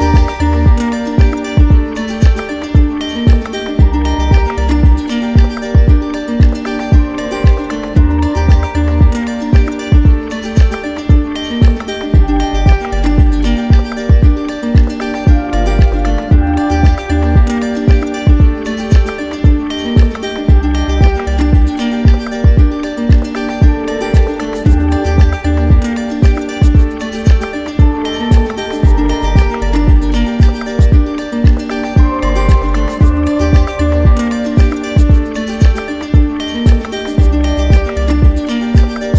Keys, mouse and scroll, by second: 1.2 right click, 2.0 right click, 3.7 click, 5.1 right click, 6.4 click, 6.9 click, 7.5 click, 8.0 click, 8.5 click, 9.5 right click, 10.4 d, 10.7 d, 11.5 right click, 12.5 right click, 12.7 d, 13.4 right click, 14.2 click, 15.9 alt+click, 17.8 alt+click, 18.8 alt+click, 19.9 right click, 20.2 right click, 20.6 right click, 21.9 right click, 22.9 alt+click, 24.2 alt+click, 25.0 right click, 26.3 right click, 28.3 click, 29.4 click, 29.4 right click, 30.4 alt+click, 30.9 alt+click, 31.1 alt+click, 32.0 right click, 32.8 right click, 34.3 click, 35.6 click, 36.4 right click, 37.7 right click, 38.5-39.1 typing.